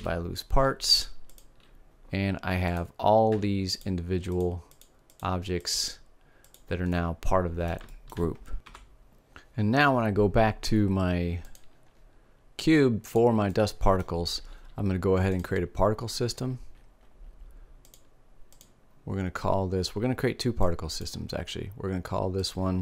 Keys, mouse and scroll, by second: 0.4 middle click, 2.6-8.3 drag, 3.2 Tab, 8.3 middle click, 11.8-13.8 drag, 13.8-15.6 middle drag, 15.6-17.3 drag, 18.6 click.